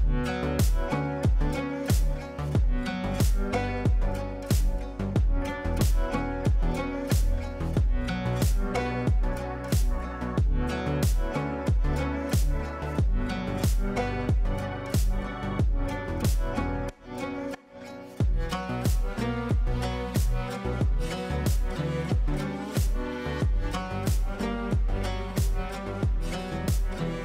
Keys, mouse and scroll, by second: 0.8 e, 1.3 click, 5.5 space, 7.1 click, 10.2 right click, 10.7 click, 11.7 ctrl+a, 13.5-15.7 typing, 16.5 ctrl+space, 18.1 shift+click, 18.3-19.3 typing, 19.9 F2, 20.5-21.2 drag, 22.6-23.8 shift+drag, 26.7 ctrl+right click.